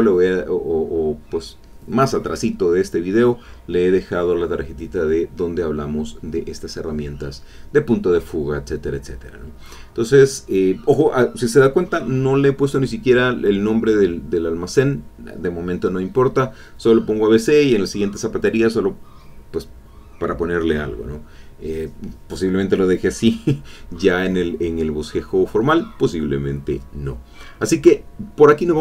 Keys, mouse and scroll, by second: 1.0 click, 8.5-10.2 middle drag, 10.4 middle click.